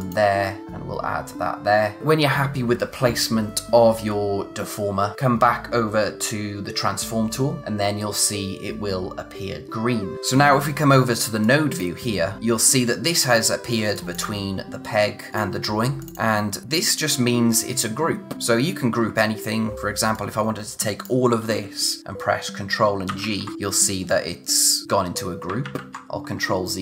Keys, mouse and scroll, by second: 0.0 click, 7.6 click, 11.4 click, 12.3 scroll up 1, 12.4 scroll down 1, 12.6-13.8 scroll up 1, 13.8 space, 13.9 click, 18.3 scroll down 1, 19.0-19.5 scroll up 1, 19.5-20.1 scroll down 1, 20.1 click, 23.1 ctrl+g, 23.5-25.1 scroll up 1, 25.6 ctrl+z, 26.3-26.8 scroll down 1.